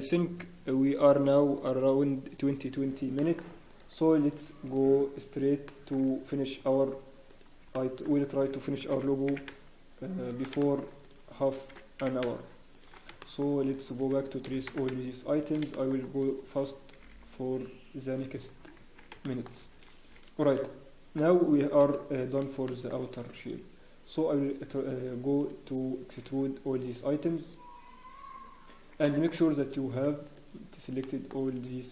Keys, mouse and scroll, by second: 3.2 shift+middle click, 3.7 click, 4.3 shift+click, 4.6 click, 5.6 shift+middle click, 6.2 click, 6.2-6.6 scroll up 1, 6.6 shift+click, 7.7 shift+middle click, 7.7-8.0 scroll up 1, 8.9 click, 8.9 g, 10.6 shift+middle click, 11.0 click, 11.7 g, 13.2 shift+middle click, 13.7 click, 14.4 g, 15.7 shift+middle click, 16.2 click, 16.9 g, 18.3-18.8 scroll down 5, 18.4 Tab, 18.8 Tab, 19.2 shift+middle click, 19.2 scroll down 1, 19.5 scroll up 1, 19.7 scroll down 1, 20.5 middle click, 21.8-22.2 scroll down 5, 21.8 KP_1, 22.6 shift+middle click, 22.9 scroll down 1, 25.4 alt+click, 27.4-27.8 scroll down 1, 27.8 scroll up 1, 28.4 scroll down 3, 29.0 shift+middle click, 29.0-29.4 scroll up 2, 30.2 shift+click, 31.0 shift+middle click, 31.0 scroll up 1.